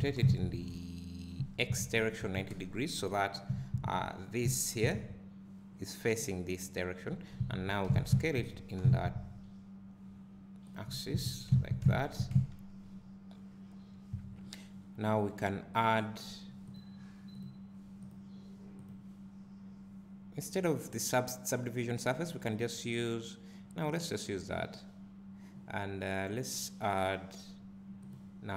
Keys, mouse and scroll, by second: 3.5 Tab, 3.8-4.5 scroll up 1, 4.5 1, 4.8 click, 7.1 Tab, 7.9 s, 10.9 Tab, 12.0 Tab, 12.4 `, 24.2-28.5 drag.